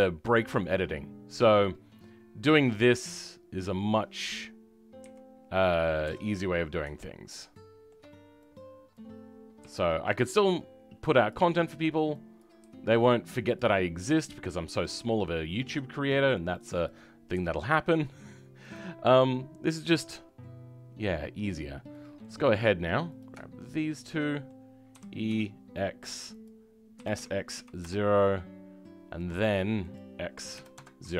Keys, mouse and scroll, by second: 0.0 middle click, 0.0-0.4 scroll down 3, 0.4-3.5 middle drag, 3.5-4.9 scroll up 3, 4.9 KP_1, 6.3-7.2 scroll up 3, 7.2-8.9 shift+middle drag, 8.9 click, 9.5 g, 12.3 click, 18.8 scroll down 3, 19.1 middle click, 20.1-21.8 scroll up 2, 21.8-23.1 middle drag, 23.1-24.2 drag, 24.2 middle click, 24.8 c.